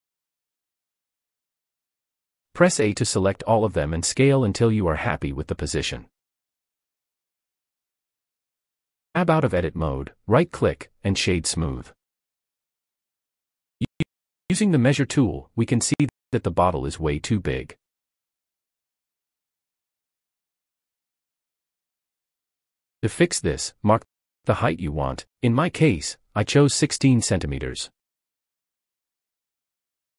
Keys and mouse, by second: 0.0-0.4 typing, 2.4 a, 3.0 s, 3.2 z, 6.5 g, 6.8 z, 8.6 click, 9.0 Tab, 10.1 click, 11.5-13.9 middle drag, 17.6-20.8 drag, 23.8-27.8 drag.